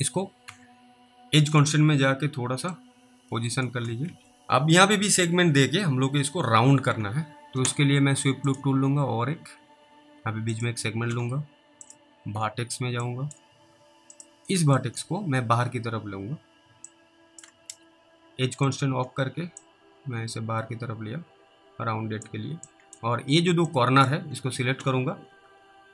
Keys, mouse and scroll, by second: 0.5 w, 1.6 click, 3.0 click, 4.1 ctrl+z, 4.3 scroll down 1, 8.5 click, 12.4-13.3 typing, 13.3 click, 15.1 click, 17.2 click, 17.7 ctrl+z, 18.7 click, 19.9 click, 23.0 click, 24.0 ctrl+click.